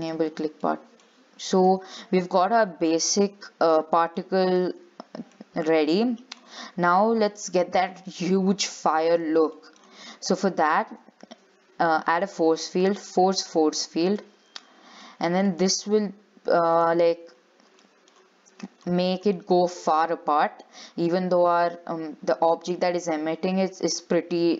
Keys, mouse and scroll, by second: 0.2 click, 0.6 scroll down 5, 0.9 shift+middle click, 1.3-2.2 scroll up 11, 2.2 shift+middle click, 3.0-3.3 scroll up 2, 3.3 middle click, 4.1 scroll down 4, 4.4 shift+middle click, 4.9-6.1 scroll up 6, 6.1 shift+middle click, 6.6-7.4 scroll up 5, 7.4 middle click, 7.9-9.5 scroll down 5, 9.5-9.8 scroll down 5, 9.8 shift+middle click, 10.0-10.8 scroll up 13, 11.2 shift+a, 14.1 scroll down 4, 14.4-16.9 shift+middle drag, 16.9 click, 17.5-18.0 scroll down 8, 18.0 shift+middle click, 18.4-19.0 scroll up 1, 19.0-19.4 scroll up 4, 19.4-19.8 scroll down 4, 21.2 g.